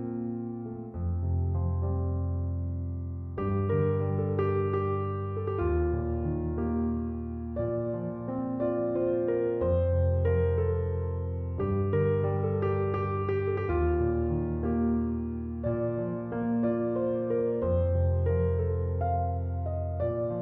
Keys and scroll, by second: 1.7 9, 2.0 0, 3.0 -, 5.2 3, 5.5 0, 9.0 BackSpace, 10.6 8, 10.9 0, 11.6 -, 12.7 2, 13.0 0, 13.9 Return.